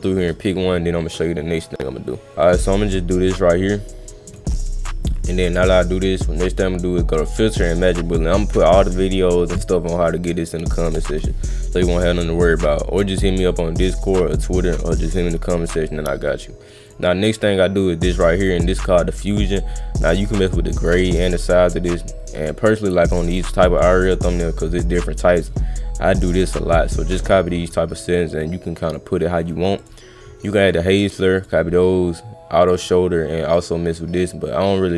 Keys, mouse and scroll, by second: 1.3-2.0 middle drag, 2.4 click, 4.3 click, 6.5 click, 8.4 click, 13.8 click, 14.3 click, 15.2 click, 16.3 click, 16.9 click, 20.1 click, 21.0-23.8 drag, 28.4 click, 29.8 click, 31.4 click, 32.6 click, 33.5-34.9 drag.